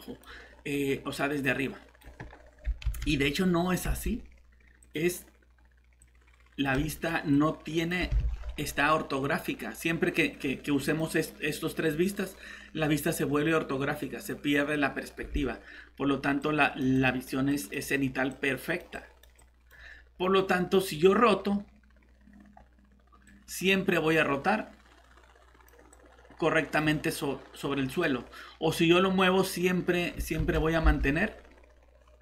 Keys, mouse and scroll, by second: 2.8 ctrl+z, 8.3 alt+Tab, 15.3 alt+Tab, 30.4 ctrl+z, 30.9 alt+Tab.